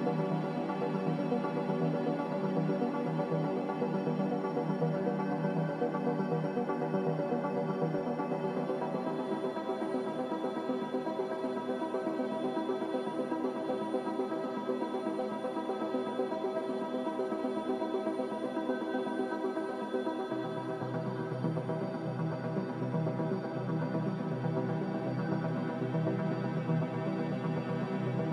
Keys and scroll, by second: 26.5-27.7 typing.